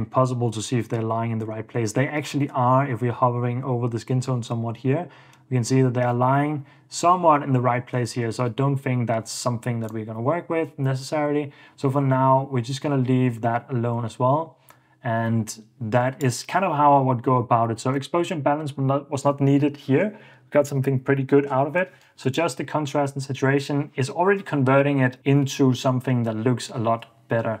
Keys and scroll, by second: 22.9 super+d.